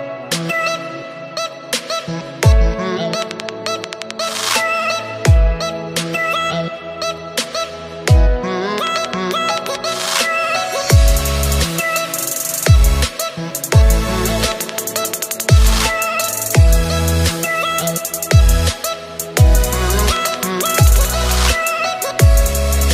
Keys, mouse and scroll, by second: 0.4 shift+d, 4.1-4.5 scroll up 1, 4.5-5.1 shift+middle drag, 5.1-5.5 scroll up 4, 6.0 s, 13.7-15.6 scroll down 1, 15.6 shift+d, 16.3 r, 19.2 ctrl+z, 20.2 s.